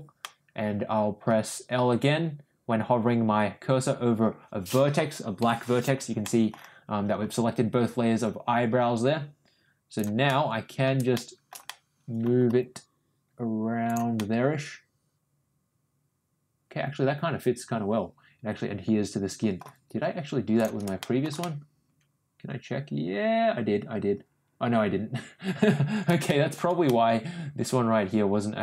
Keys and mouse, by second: 0.2-1.2 middle drag, 5.4 l, 6.2 middle click, 7.2 g, 10.2 middle click, 11.1 middle click, 11.6 middle click, 12.4 g, 14.1-19.5 middle drag, 20.8 shift+g, 20.9 middle click, 21.3-26.5 middle drag, 26.8-27.8 middle drag, 27.9 middle click.